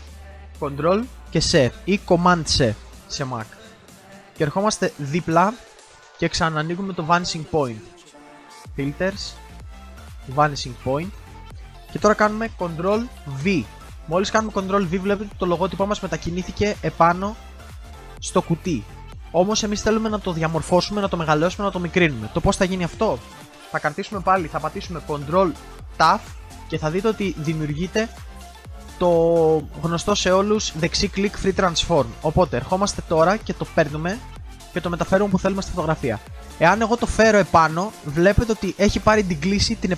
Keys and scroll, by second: 0.4 ctrl+z, 1.2 ctrl+c, 12.4 ctrl+c, 13.3 ctrl+v, 26.0 ctrl+t.